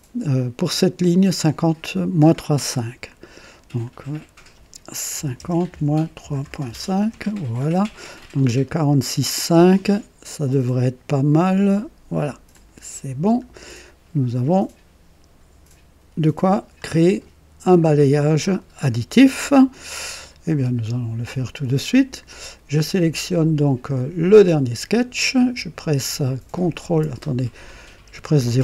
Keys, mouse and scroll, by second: 0.6 click, 3.8 click, 5.1-6.9 typing, 5.7 KP_Subtract, 7.1 Return, 8.1 scroll up 1, 8.6 right click, 12.5 click, 24.3 click, 28.2 ctrl+KP_0.